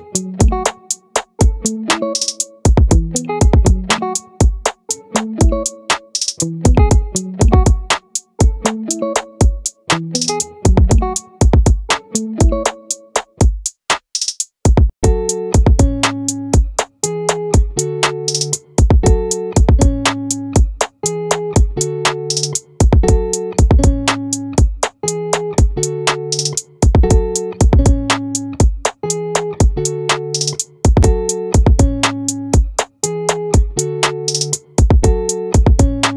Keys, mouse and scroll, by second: 0.5-2.3 right drag, 4.8 Tab, 6.2-8.2 drag, 8.4 right click, 11.2-12.6 right drag, 21.0-24.2 right drag, 24.2 middle click, 24.8-26.0 right drag, 34.1-35.7 right drag.